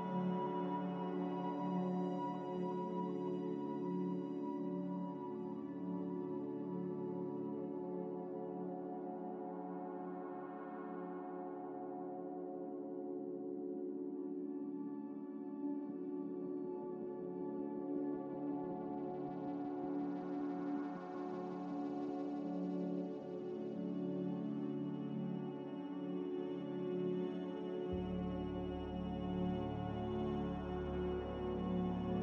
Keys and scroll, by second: 1.5 ctrl+z, 13.1 z, 14.2-15.0 typing, 20.1-21.0 typing, 22.0-22.9 typing, 24.8-29.2 typing.